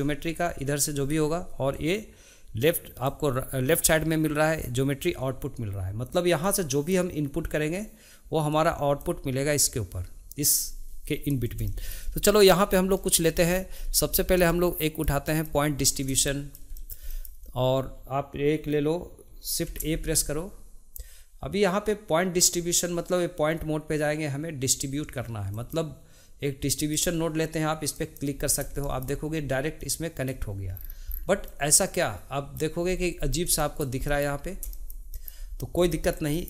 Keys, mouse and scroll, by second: 3.8-6.5 drag, 8.5 click, 11.6-16.0 shift+middle drag, 16.2-19.6 middle drag, 19.6 shift+a, 28.8-29.8 shift+middle drag, 29.8 click, 30.7-31.5 scroll down 2, 31.5-32.8 middle drag, 32.8-33.6 scroll up 4, 33.6-36.4 shift+middle drag.